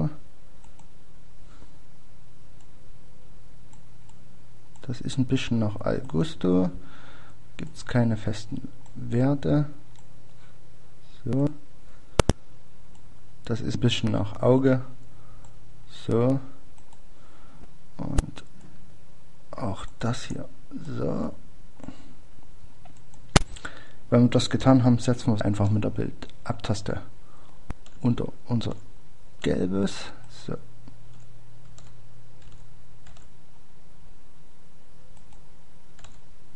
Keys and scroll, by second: 35.9 Page_Down.